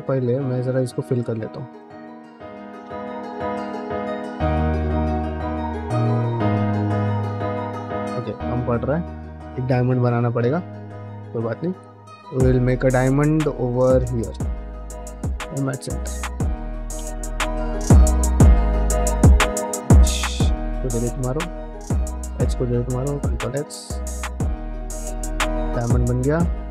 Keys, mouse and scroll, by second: 0.5-2.6 typing, 0.7 click, 1.2 middle click, 2.0 middle click, 2.9 middle click, 3.5 middle click, 5.2 f, 6.3 middle click, 6.6 f, 7.0 f, 9.1 ctrl+z, 9.3 ctrl+z, 9.4 ctrl+z, 10.0 middle click, 10.6 shift+middle click, 10.9 middle click, 11.2 1, 11.5 click, 11.8 middle click, 13.7 click, 14.0 shift+click, 14.2 shift+click, 15.4 m, 16.4 2, 16.6 click, 16.8 ctrl+x, 17.2 1, 17.9 x, 20.0 x, 21.2 ctrl+z, 21.5 x, 22.4 2, 22.7 click, 23.0 ctrl+x, 23.2 1, 23.4 click, 23.5 g, 24.0 click, 24.5 click, 24.5-26.7 typing, 25.1 click, 25.6 middle click, 26.3 click.